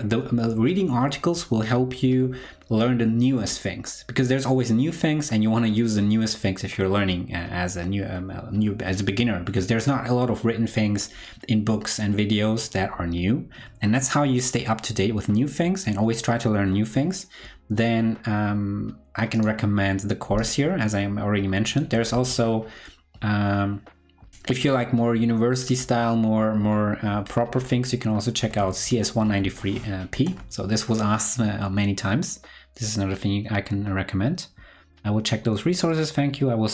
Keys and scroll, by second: 22.1 super+t.